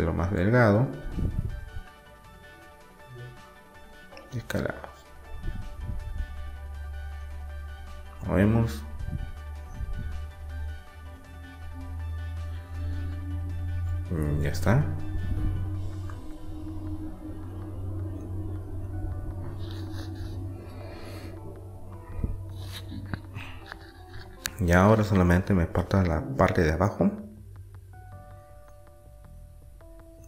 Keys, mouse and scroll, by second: 2.2 s, 4.8-6.8 middle drag, 7.4-8.8 drag, 8.8 middle click, 11.5-14.5 middle drag, 16.3 middle click, 22.5-26.8 middle drag.